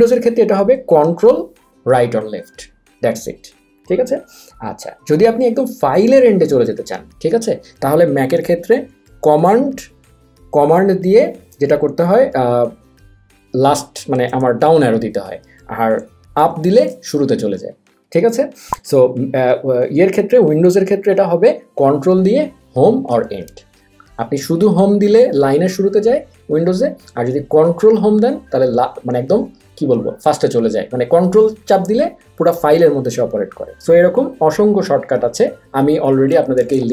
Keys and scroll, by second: 13.2 super+Down, 16.5 super+Up.